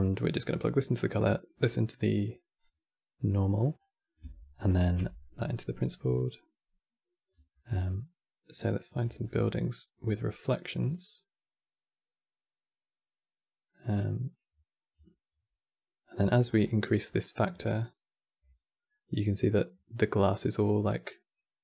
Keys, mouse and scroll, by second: 0.6 click, 2.3 click, 3.5 scroll down 3, 3.7-4.4 middle drag, 4.4 ctrl+shift+click, 4.9-12.0 middle drag, 15.9 middle click, 16.1-16.8 scroll up 11, 16.8 middle click, 17.3-20.3 drag.